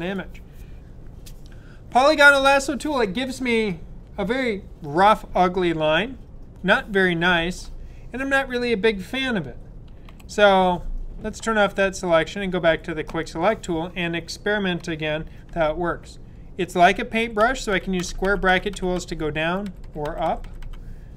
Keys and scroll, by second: 10.0 super+d, 17.3-20.6 typing.